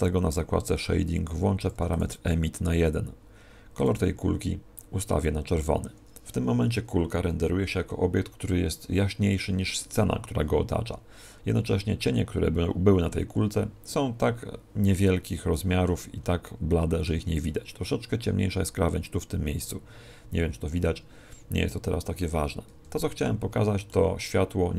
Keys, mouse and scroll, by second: 3.7 click.